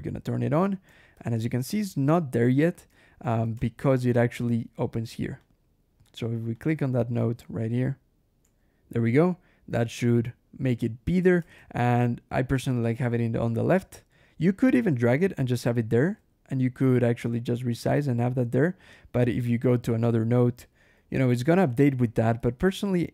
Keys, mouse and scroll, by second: 0.5 ctrl+click, 1.0 ctrl+shift+h, 3.1 ctrl+shift+h, 3.9 ctrl+shift+l, 5.3 click, 5.9 click, 6.4 click, 7.0 click, 8.3 \, 10.3 scroll up 1, 11.4 ctrl+shift+h, 13.0-15.3 drag, 15.6 ctrl+shift+h, 15.7 ctrl+shift+l, 17.8 click, 19.5 alt+r, 20.3 alt+h, 20.8 alt+r, 22.2 alt+h.